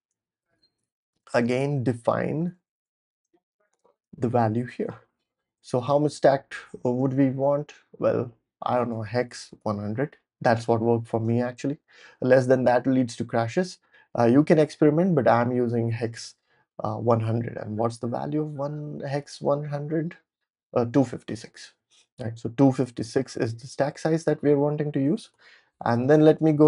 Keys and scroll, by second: 0.0-4.3 typing, 4.5 super+v, 5.4 Tab, 5.5 Tab, 5.7 Tab, 6.0 Tab, 8.6-10.0 typing, 11.6 super+s, 22.8 super+s, 25.3 ctrl+l, 25.7-26.6 typing.